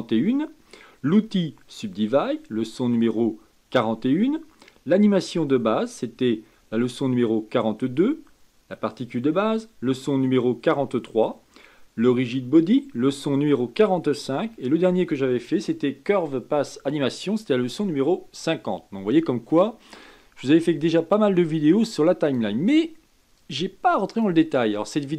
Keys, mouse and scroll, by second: 21.6 click, 23.3-25.1 drag.